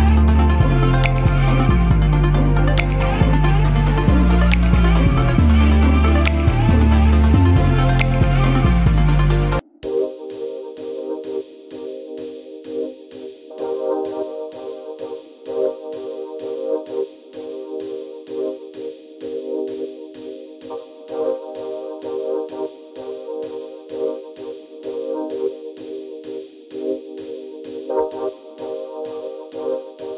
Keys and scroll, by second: 0.0 Return, 5.9 space, 9.5 space, 23.1 space.